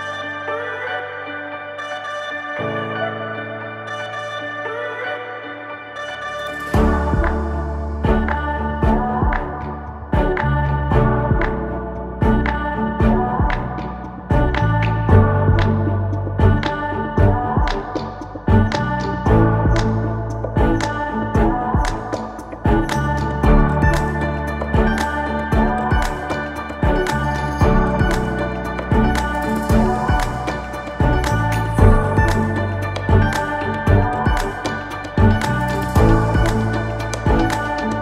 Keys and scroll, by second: 1.7 ctrl+alt+r, 2.9 ctrl+j, 4.1 ctrl+t, 7.4 Return, 8.8-21.4 typing, 9.5 ctrl+z, 14.1 ctrl+z, 14.4 ctrl+z, 20.5 ctrl+z, 21.9 ctrl+alt+r, 22.7 space, 22.8 ctrl+z, 23.0 space, 23.4 Delete, 26.8 Return, 31.1 Return, 32.9 Delete, 35.0 Delete, 35.3 ctrl+d, 35.5 space.